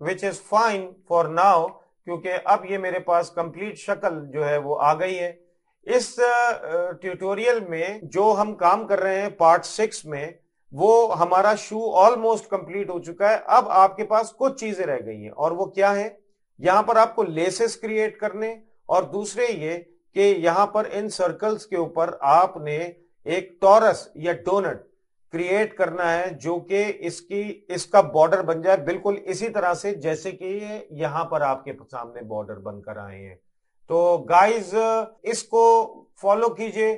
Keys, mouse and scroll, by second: 1.3 middle click, 2.0 middle click, 12.8 middle click, 15.5 middle click, 19.0 middle click, 34.8 middle click, 35.2 middle click, 36.1 shift+middle click.